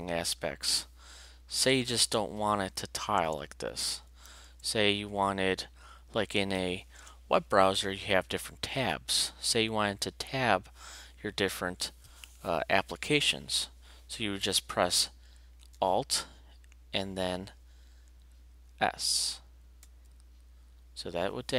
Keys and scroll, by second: 1.5 alt+Return, 3.2 alt+Return, 4.1 alt+v, 4.4 alt+Return, 6.4 alt+v, 7.0 alt+Return, 19.8 alt+s.